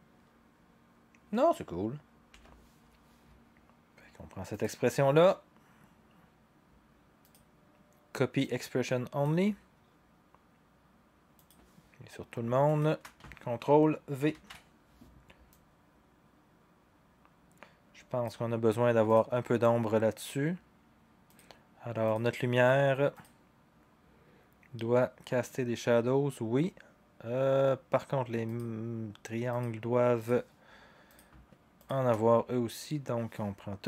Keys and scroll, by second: 2.3 0, 14.3 ctrl+v.